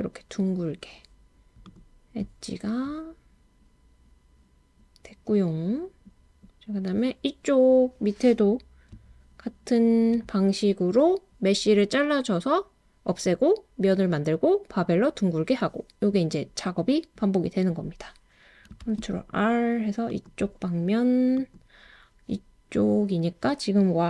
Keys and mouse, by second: 18.8 super+r, 21.4 click.